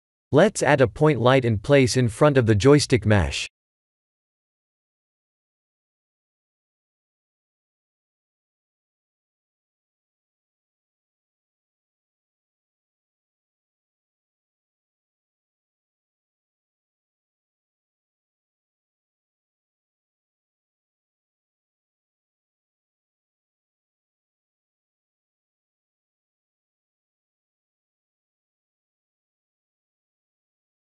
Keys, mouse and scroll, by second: 0.9 shift+a, 7.6 click, 9.1 click, 11.9 click, 15.4 click, 16.7 0, 21.7 click, 23.1 5, 23.2 5.